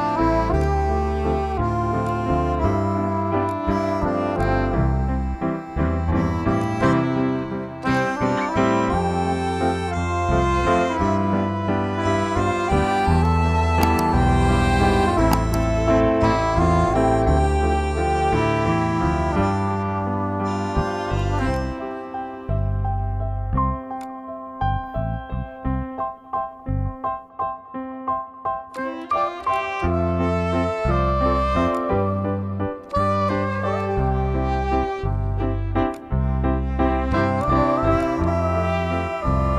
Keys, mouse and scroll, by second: 6.4 click, 9.9-12.7 typing, 14.2-18.1 typing, 21.4 click, 23.7-28.5 alt+shift+drag, 35.7-39.5 drag.